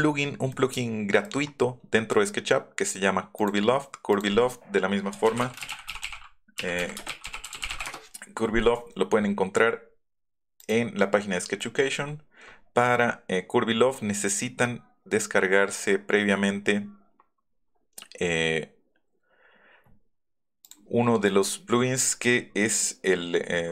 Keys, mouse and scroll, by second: 3.4 click, 4.1 click, 4.8-8.2 typing, 10.6 click, 17.8 scroll down 2, 20.6 scroll down 2, 21.9 scroll down 2, 22.7 scroll down 2.